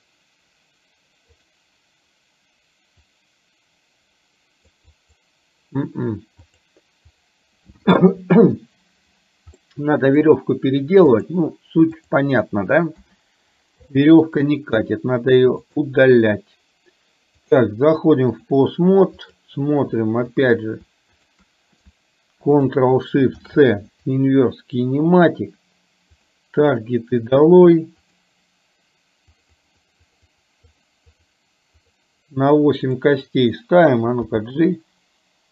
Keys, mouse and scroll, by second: 1.4 click, 4.9 click, 6.6 click, 9.7 middle click, 11.3 click, 13.2 KP_1, 13.9 shift+middle click, 15.7 click, 17.4-18.6 drag, 20.4 click, 26.3 ctrl+shift+click, 29.3-30.4 drag, 30.8 click, 31.2 click, 31.9 click, 33.1 click, 34.4 g.